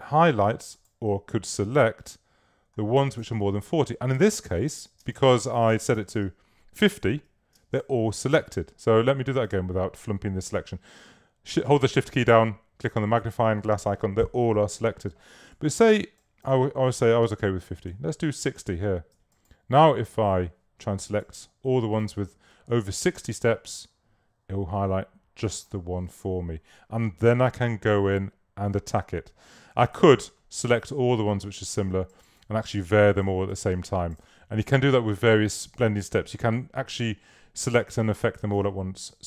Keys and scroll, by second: 3.2 super+-, 5.1 super+space, 7.6 super+space, 17.6-18.5 typing, 30.0 super+a.